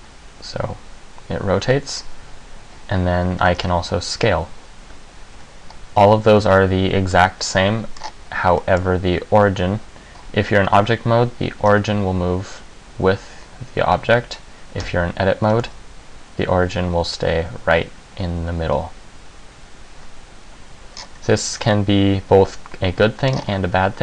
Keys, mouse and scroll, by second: 3.8 s, 5.5 Tab, 6.2 middle click, 7.7 middle click, 8.2-8.8 scroll up 1, 8.8 middle click, 8.8-9.3 scroll up 3, 11.7 g, 15.0 Tab, 15.6 g, 21.1-21.8 scroll down 3, 21.8 middle click, 21.8 scroll down 2, 23.4 scroll up 5.